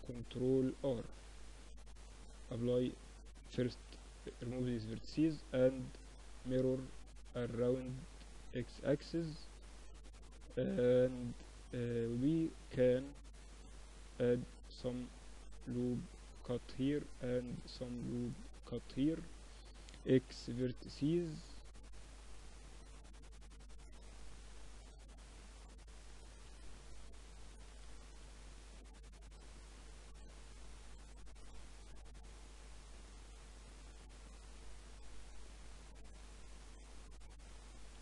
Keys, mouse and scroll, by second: 0.6-3.6 drag, 2.5 x, 4.4 Tab, 5.1-7.0 drag, 7.8 middle click, 10.8 middle click, 11.0 Tab, 12.3 ctrl+r, 15.4 ctrl+r, 16.0 ctrl+r, 18.2-20.0 drag, 18.9 x, 22.5-25.2 middle drag, 23.6-27.0 drag, 25.2-26.2 right drag, 27.2 ctrl+r, 29.9 ctrl+r, 30.8-33.2 drag, 31.3-32.6 right drag, 35.1-36.9 right drag, 35.6-37.5 drag.